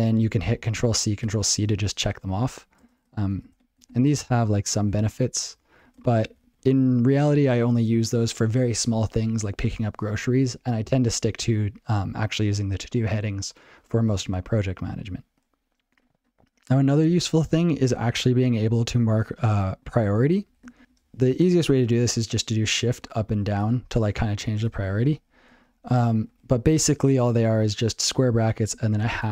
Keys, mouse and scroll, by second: 11.1 click, 15.9 ctrl+g, 19.2 ctrl+b, 19.4 ctrl+b, 19.5 ctrl+b, 19.7 ctrl+b, 20.7 ctrl+p, 20.8 alt+f, 27.9 ctrl+b, 29.0 #.